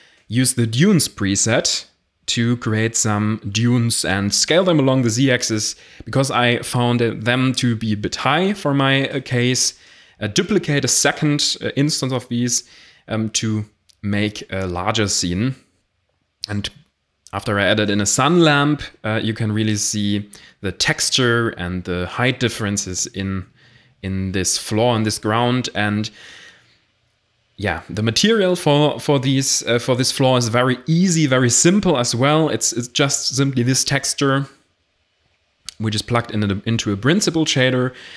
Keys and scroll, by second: 2.9 s, 3.1 z, 4.6-9.4 typing, 8.3 ctrl+alt+0, 11.3 shift+a, 14.7 g, 15.5 r, 18.6-24.7 typing, 20.7 Escape, 26.4 a, 28.7 ctrl+i, 30.6 a, 33.9 ctrl+space.